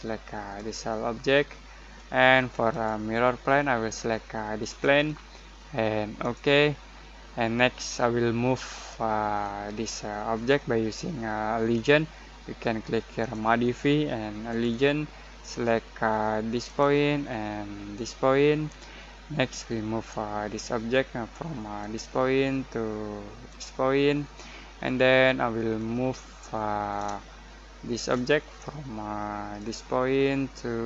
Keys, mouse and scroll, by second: 8.7 middle click, 9.7 scroll down 1, 13.2 click, 21.7 click, 21.8 click, 26.2 middle click, 27.4 shift+middle click, 29.5 click.